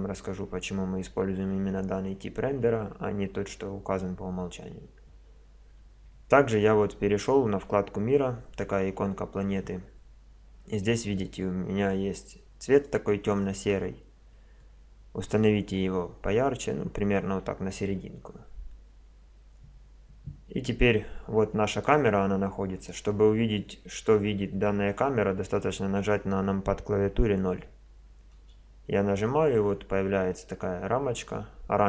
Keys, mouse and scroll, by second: 12.7-14.6 drag, 21.7-28.4 middle drag, 28.4 KP_0, 30.6-31.8 middle drag.